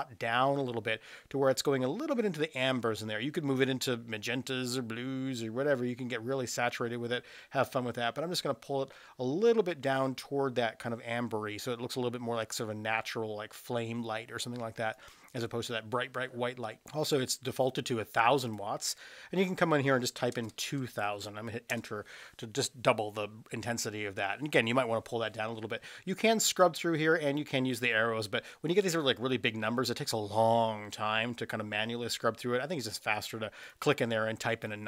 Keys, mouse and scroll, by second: 18.4-25.8 drag, 20.4 KP_0, 20.6 KP_0, 33.6-34.8 drag.